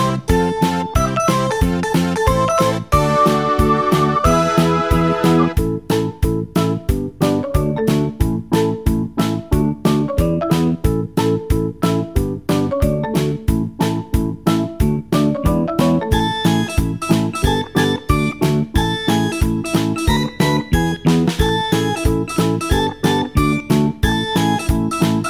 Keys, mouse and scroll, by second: 1.2-4.8 scroll down 1, 4.8-5.3 scroll down 1, 16.4-23.6 drag.